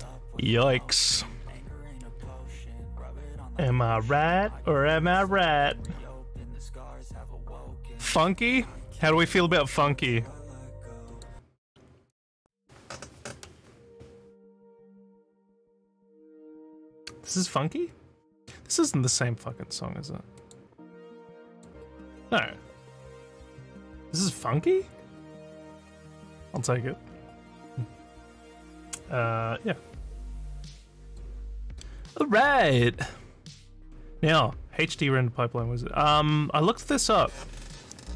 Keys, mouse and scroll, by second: 5.7 click, 9.1 click, 11.1 click, 20.4 click, 21.5 click, 31.0 click.